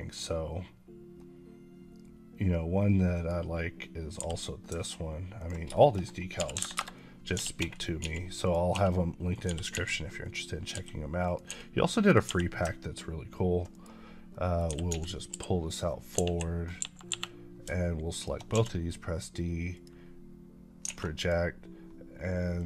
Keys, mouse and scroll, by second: 3.0 click, 4.0 g, 5.3 ctrl+click, 5.6 shift+middle click, 6.2 r, 6.4 KP_9, 6.6 KP_Enter, 7.2 g, 8.3 click, 8.6 s, 9.2 click, 9.4 g, 10.1 click, 10.6 g, 11.1 click, 11.2 click, 11.4 s, 11.9 click, 12.1 g, 13.6 right click, 14.2 middle click, 14.6 g, 15.2 y, 15.6 click, 16.1 KP_1, 18.0 shift+click, 18.4 d, 19.6 click, 20.9 a, 21.1 click.